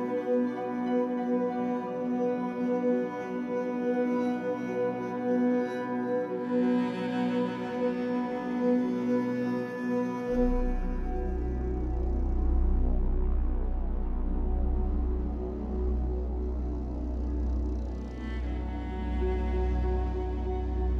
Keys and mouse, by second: 0.0-0.3 typing, 1.3 click, 2.9 click, 4.4 click, 5.2 typing, 5.4 Return, 6.5-7.6 drag, 6.5 typing, 8.6 space, 9.5-13.1 alt+drag, 13.1-14.1 typing, 14.5-17.8 drag, 19.1 click, 20.7-20.9 typing.